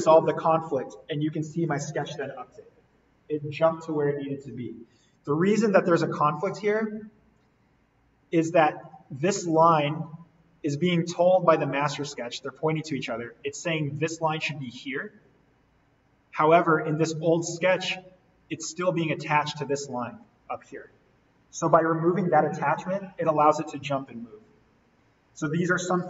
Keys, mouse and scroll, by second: 0.6 Delete, 5.2 ctrl+Delete, 5.4 ctrl+z, 6.2-7.1 scroll down 1, 7.4 click, 9.3 scroll up 1, 10.0-10.4 scroll down 1, 11.6 shift+click, 15.5-15.9 scroll up 1, 15.9-16.6 scroll down 1, 16.6 click, 16.9-19.2 scroll, 19.2-19.5 scroll down 1, 19.8 click, 21.7 Delete, 22.5-24.7 scroll up 1, 24.7-26.0 scroll down 1.